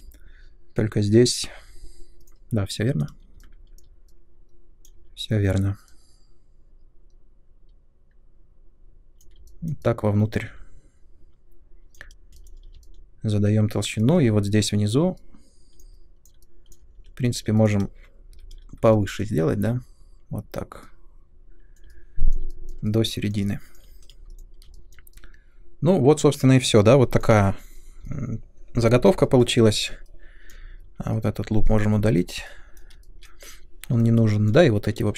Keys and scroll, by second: 12.3 space, 16.9 3, 18.3 i, 19.5 w, 24.1 space, 30.7 3, 31.5 2, 32.1 Delete.